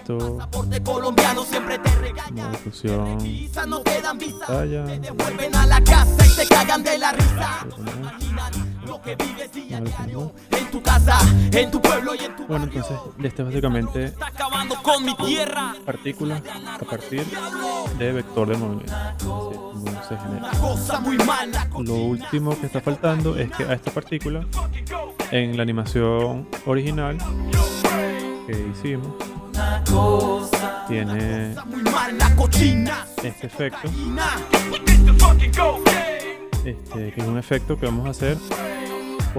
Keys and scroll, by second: 5.0 super+z, 8.2 super+z, 28.0 z, 29.3 v, 31.9 z, 34.2 space, 34.9 v, 38.2 v.